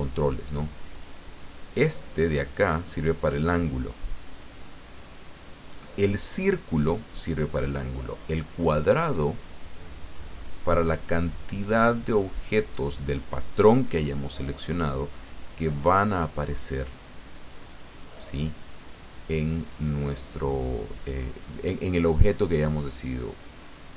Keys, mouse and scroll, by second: 1.0-5.8 drag, 8.7-22.9 drag.